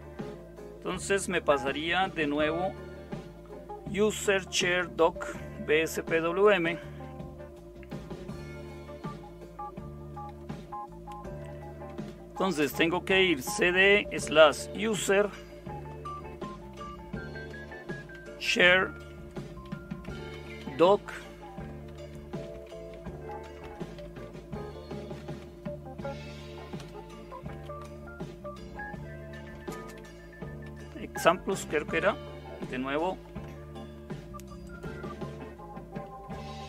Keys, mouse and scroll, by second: 10.1 super+0, 11.6-25.4 typing, 25.2 Tab, 27.5 Return, 27.6-28.3 typing, 30.0-30.7 typing, 36.1 super+7.